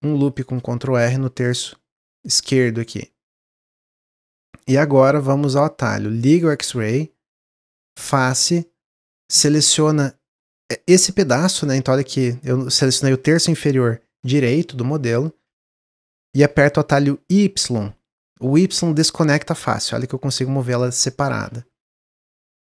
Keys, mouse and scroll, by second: 6.3-8.0 drag, 8.9 click, 17.5 y, 18.7 click, 21.2 ctrl+z, 22.3-22.6 middle drag.